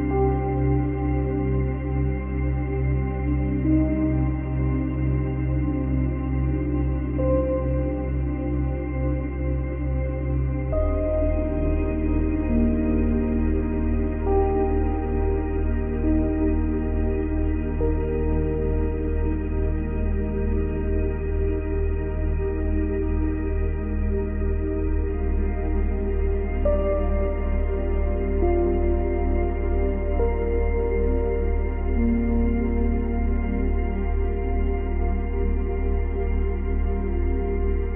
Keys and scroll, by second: 2.4 space, 4.9 space, 18.8 space, 21.3 space, 25.3 space, 27.1 space, 32.3 space, 34.5 space.